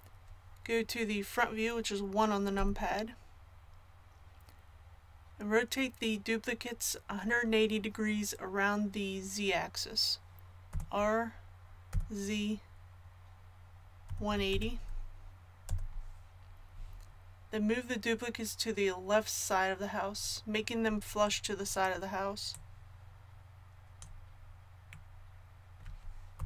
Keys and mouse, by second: 2.5 KP_1, 10.7 r, 22.5-24.4 drag, 26.3 KP_7.